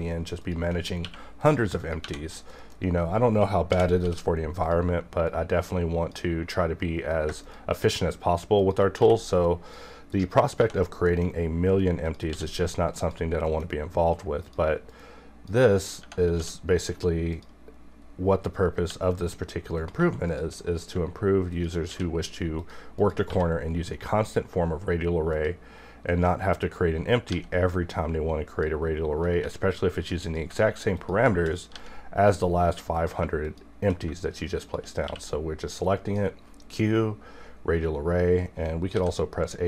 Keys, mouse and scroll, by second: 0.4 shift+click, 1.0 q, 1.4 click, 2.0 1, 2.5 middle click, 2.8-3.4 scroll up 1, 3.7 alt+v, 4.0 e, 4.6-7.4 drag, 7.4 shift+click, 9.0 q, 9.4 click, 10.6 1, 10.8 scroll down 1, 11.1 middle click, 12.0 click, 12.3 d, 13.0 click, 14.4 click, 16.0 Tab, 16.3 d, 17.3 click, 18.3-18.8 scroll up 1, 18.9 g, 19.8 click, 20.3 shift+click, 20.8 scroll down 1, 21.5 shift+click, 21.9 q, 22.6 click, 23.3 1, 23.6-23.9 scroll down 1, 23.9 middle click, 24.2-25.3 scroll up 1, 25.3 click, 27.3 g, 29.4 e, 30.2 click, 31.0 shift+click, 31.7 g, 32.9 click, 33.4 shift+click, 34.6 shift+click, 35.0 q, 35.8-38.9 drag, 38.9 a.